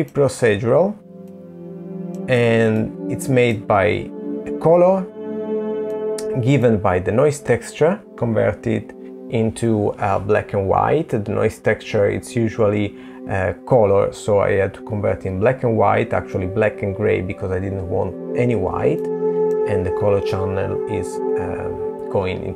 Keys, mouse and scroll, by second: 0.4 middle click, 16.7 middle click, 20.7 middle click.